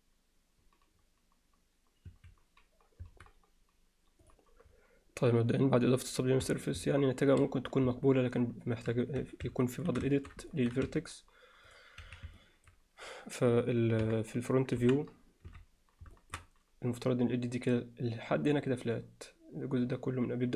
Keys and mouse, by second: 6.1 click, 6.5 Tab, 7.0-7.3 alt+middle drag, 8.1-8.9 alt+middle drag, 9.2 Tab, 9.6 alt+middle click, 10.1 alt+shift+middle drag, 10.5 ctrl+alt+middle click, 10.8 z, 11.7 click, 12.0 z, 12.4 alt+middle click, 14.0 KP_3, 14.8 KP_1, 15.5 z, 16.2 alt+shift+middle click.